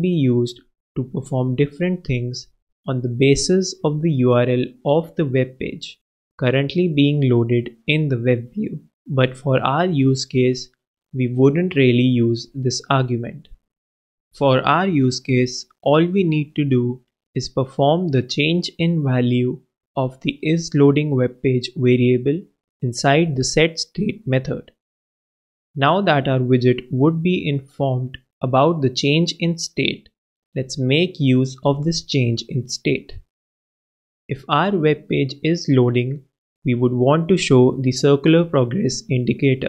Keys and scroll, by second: 0.2 shift+], 0.6 shift+Left, 20.1 super+Return, 20.7 super+v.